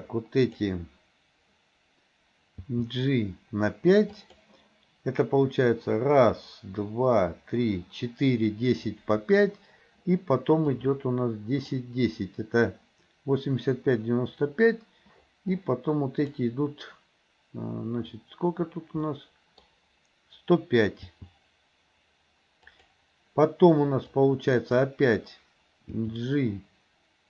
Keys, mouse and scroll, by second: 2.7 g, 10.7-11.8 drag, 15.6-16.4 drag, 19.1 middle click, 21.1 g, 24.2-24.8 drag, 26.1 g.